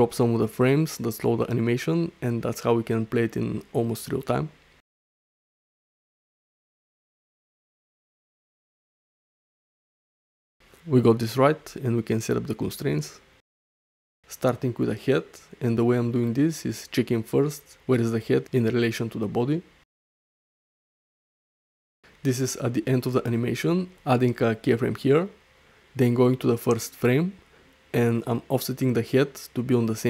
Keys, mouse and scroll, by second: 1.0 space, 6.7 space, 7.8 shift+Right, 9.1-9.5 middle drag, 9.9 shift+middle drag, 10.2-11.1 middle drag, 12.1 click, 14.2-16.4 drag, 17.1 middle click, 17.8 shift+middle click, 18.1-20.0 middle drag, 20.8-21.3 middle drag, 23.2 shift+middle click, 23.5 middle click, 24.8 i, 26.7 shift+Left, 27.3-27.8 middle drag, 28.0 shift+middle click, 28.2-28.6 middle drag, 29.0 shift+middle drag, 29.2-29.6 middle drag.